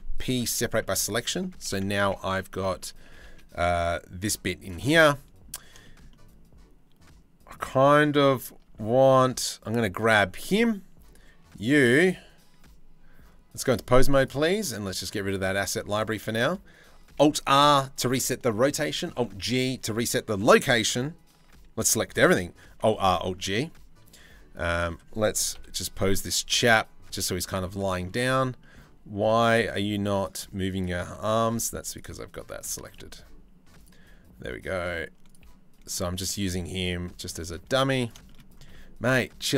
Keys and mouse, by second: 0.5 Tab, 1.6 Tab, 2.3 a, 2.6 g, 8.3 Tab, 10.7 click, 13.3 click, 14.8 click, 15.8 shift+middle drag, 17.9 alt+r, 20.9 alt+g, 21.1 a, 22.9 alt+r, 25.1 KP_3, 25.5 KP_1, 26.3 r, 28.2 shift+middle drag, 28.8 r, 31.0 g, 31.7 r, 32.4 g, 35.4 g, 36.1 r, 37.2 g, 37.8 shift+middle click, 39.1 r.